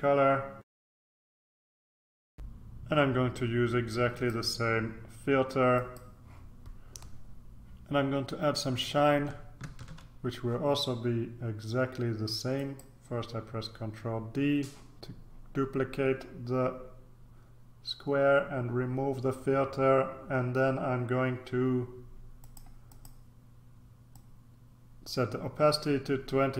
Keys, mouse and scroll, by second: 0.9 click, 1.7 click, 2.2 click, 4.1 click, 5.7 click, 9.6 ctrl+d, 12.6 click, 22.3 click, 24.1-26.5 drag.